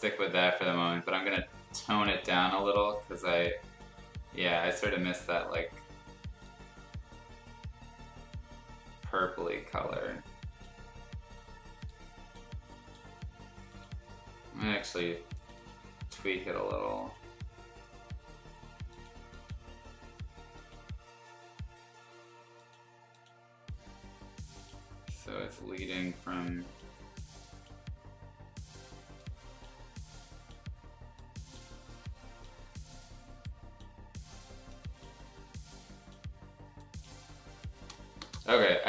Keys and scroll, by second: 38.2 Return.